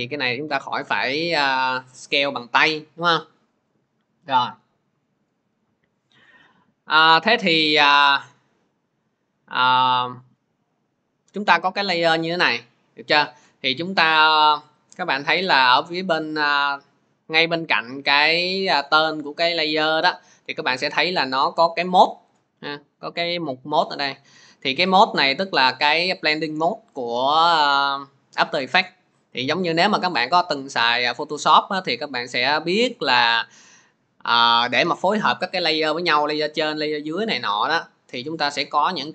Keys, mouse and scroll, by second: 5.2-6.4 middle drag, 9.9-15.0 drag, 18.8 click, 19.6 click.